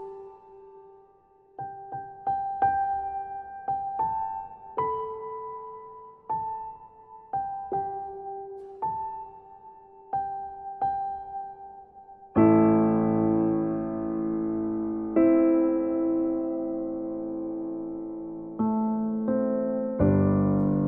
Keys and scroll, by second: 5.6 ctrl+c, 5.9 ctrl+v.